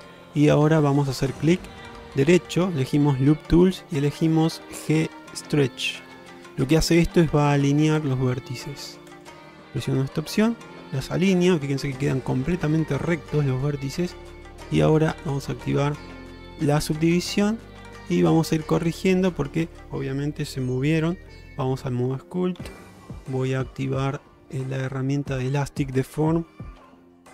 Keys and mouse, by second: 1.3-9.3 right drag, 10.3-12.2 middle drag, 17.3 alt+z, 18.2 middle click, 20.5 ctrl+Tab, 22.7 q, 26.1 shift+middle click, 26.9 f.